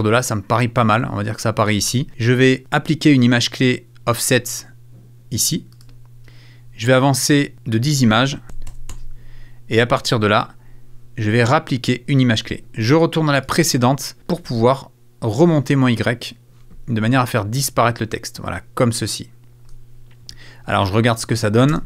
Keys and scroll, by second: 8.4 Right, 21.7 space.